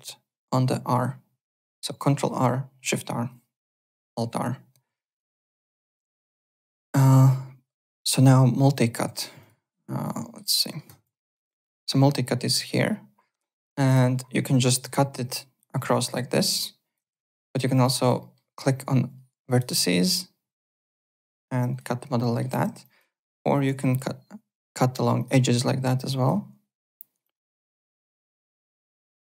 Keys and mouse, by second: 5.1 alt+Tab, 5.4 alt+click, 9.0 alt+Tab, 9.4 alt+click, 9.7 alt+Tab, 9.9 alt+click, 10.2 alt+middle click, 10.4 alt+right click, 10.6 alt+middle click, 10.8 alt+click, 11.1 alt+middle click, 13.9 click, 14.6 click, 16.0 alt+click, 17.1 ctrl+z, 17.6 alt+middle click, 17.9 alt+click, 18.2 alt+middle click, 19.4 click, 21.0 click, 21.5 Return, 21.7 right click, 22.2 alt+middle click, 22.5 w, 22.8 alt+click, 23.1 alt+right click, 23.6 y, 25.1 click, 26.1 click, 27.2 click, 28.1 click, 28.4 KP_Enter, 28.4 Return, 28.9 click.